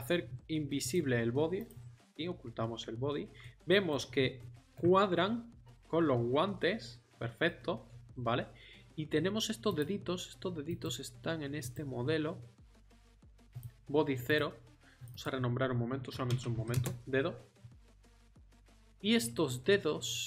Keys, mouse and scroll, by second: 5.7 middle click, 6.0 middle click, 6.2 middle click, 10.8-11.6 right drag.